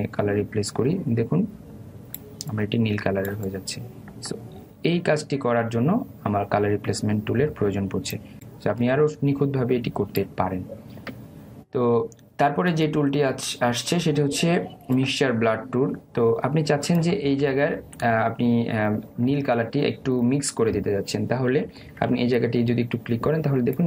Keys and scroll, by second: 18.6 ctrl+alt+z.